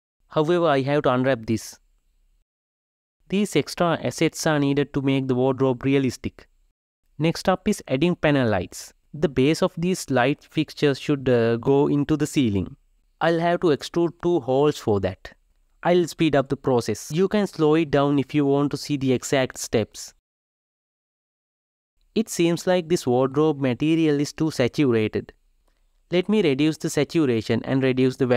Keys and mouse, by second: 3.2 g, 4.3 shift+click, 4.5 g, 5.2 shift+click, 5.4 g, 6.6 r, 8.2 alt+z, 8.3 g, 9.4 g, 9.9 ctrl+r, 10.6 ctrl+r, 10.8 ctrl+z, 11.5 ctrl+r, 12.5 alt+click, 12.6 g, 14.5 alt+Left, 14.7 shift+r, 15.3 3, 15.5 Left, 16.3 shift+Left, 16.4 shift+Left, 16.6 shift+middle click, 16.8 shift+click, 17.1 shift+click, 17.2 e, 18.8 g, 20.3 g, 20.3 g, 22.0 click, 22.9-27.3 drag.